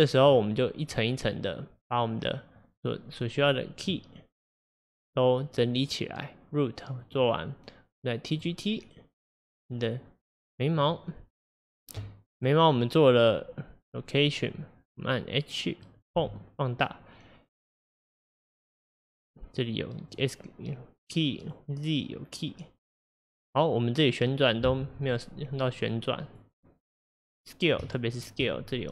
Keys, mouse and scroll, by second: 0.0-6.5 drag, 7.1 click, 8.4 click, 9.4 click, 11.6-17.8 drag, 15.9 middle click, 16.2 Home, 18.4 click, 20.1 click, 21.5 click, 23.0 click, 25.8 click, 26.3 click, 27.3 click, 27.9 shift+click, 28.2 shift+click.